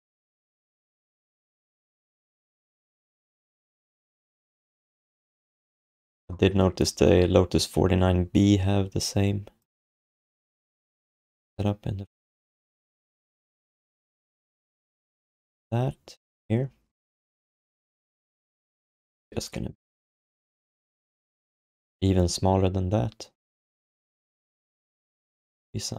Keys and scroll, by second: 21.1 r.